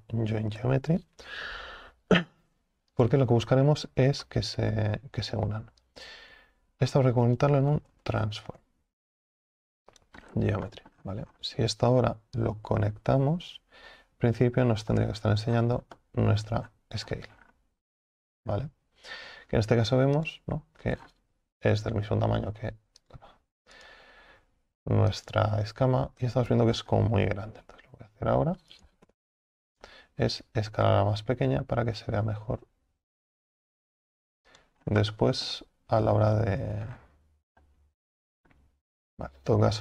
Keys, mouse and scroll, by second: 6.4 click, 15.5 scroll down 6, 16.0-16.7 middle drag, 16.7-17.1 scroll up 7, 17.4 scroll down 4, 17.9 scroll up 1, 19.2-20.1 scroll up 5, 20.3 click, 20.9-21.8 scroll down 6, 21.8-23.0 right drag, 23.0 click, 23.8-25.3 right drag, 25.3 click, 25.7 Tab, 26.3 a, 26.5 a, 26.7 scroll up 7, 27.6 s, 29.1 o, 29.9 s, 34.8 scroll up 5, 35.1-36.4 middle drag, 36.4 ctrl+z, 36.9 scroll down 5, 37.6-39.0 middle drag, 39.0 Tab.